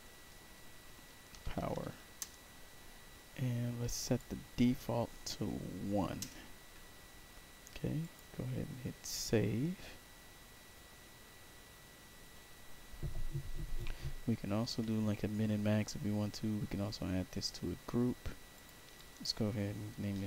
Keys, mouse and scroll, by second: 0.0-2.1 typing, 4.0 click, 7.9 click, 15.8 middle click, 15.8 scroll down 2, 15.9 middle click, 18.5 click, 18.9 click, 19.9-20.2 typing.